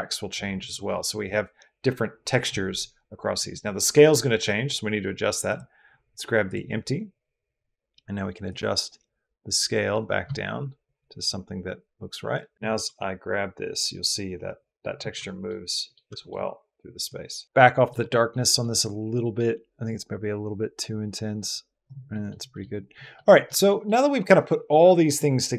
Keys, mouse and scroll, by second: 5.4-6.4 drag, 8.3-12.6 drag, 12.7 g, 14.8 Escape, 15.1 middle drag, 15.5 middle drag, 16.0 shift+click, 17.0 middle click, 17.6 middle drag, 18.0 middle click, 18.5 middle click, 19.7-21.7 middle drag, 21.9 middle drag, 22.3 middle click, 22.8 shift+click, 23.1 middle drag, 23.5 middle drag.